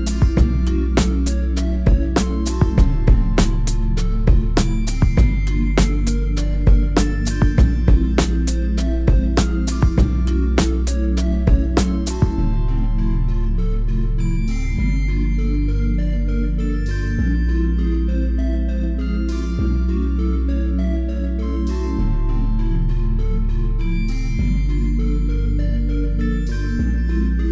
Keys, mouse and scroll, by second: 0.0-0.1 typing, 0.5 click, 1.3 click, 6.8 space, 12.5 space, 14.0 click, 16.2 ctrl+m, 16.8 ctrl+click.